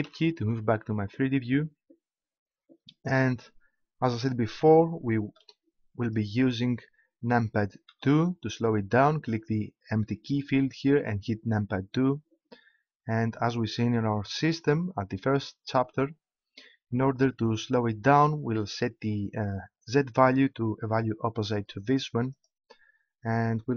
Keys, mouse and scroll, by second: 22.3-23.7 drag.